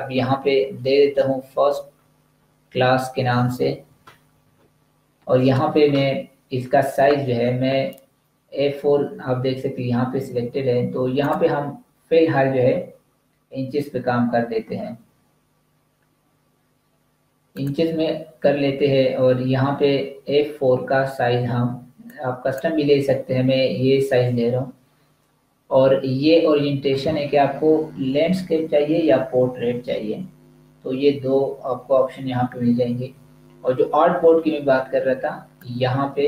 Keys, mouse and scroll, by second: 0.6-1.3 typing, 6.3 typing, 17.4 click, 22.0 click, 35.5 click.